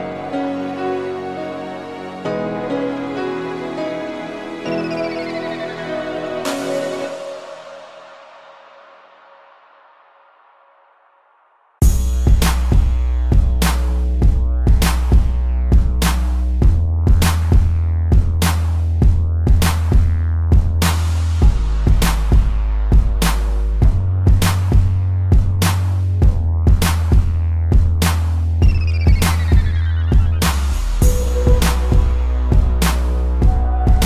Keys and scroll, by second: 1.9 ctrl+0, 3.4 z, 4.2 space, 5.2 ctrl+0, 12.7 space, 16.0 z, 17.4 p, 22.6 a, 24.9 ctrl+0, 28.5 z, 29.6 space.